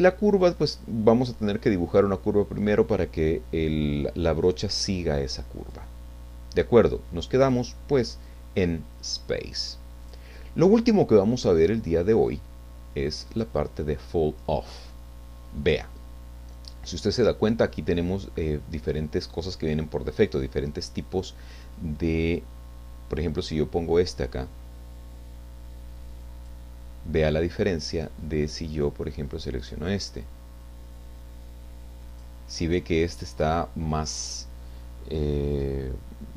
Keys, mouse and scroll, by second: 0.4 click, 5.6 click, 7.4 click, 10.0-15.1 drag, 22.3 click, 24.5-26.7 drag, 29.8 click, 30.6-32.4 drag.